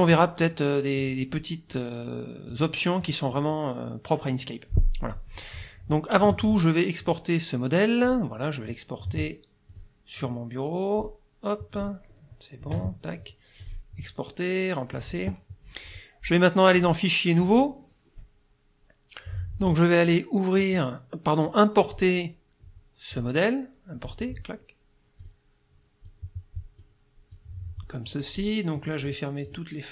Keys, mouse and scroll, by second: 0.1 click, 1.0 click, 2.5 click, 3.0 click, 7.1 click, 8.1 click, 9.7 click, 11.0 click, 12.8 Escape, 13.7 click, 15.0 click, 16.8 click, 17.4 click, 20.6 click, 22.0 click, 23.2 click, 24.1 click, 25.2 click, 26.1 click, 27.4 click, 29.1 click, 29.5 click.